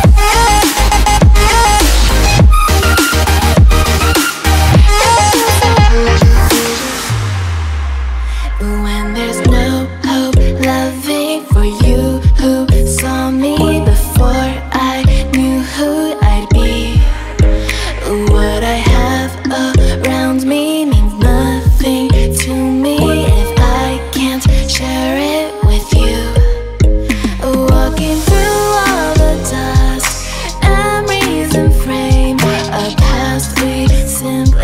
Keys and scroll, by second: 25.1 0.